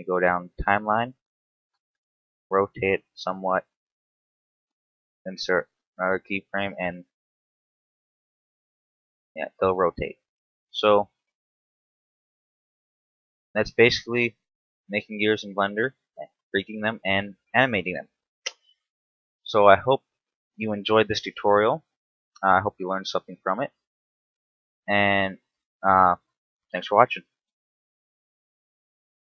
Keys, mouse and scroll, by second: 0.3 click, 1.6 r, 4.2 click, 4.9 i, 6.3 shift+Left, 7.0 alt+a, 10.7 Escape, 13.4 alt+i, 15.0 Up, 15.5 alt+i, 16.9 shift+Left, 18.5 scroll down 1, 18.9 scroll up 1, 19.7 alt+a, 20.3 Escape, 25.4 alt+r.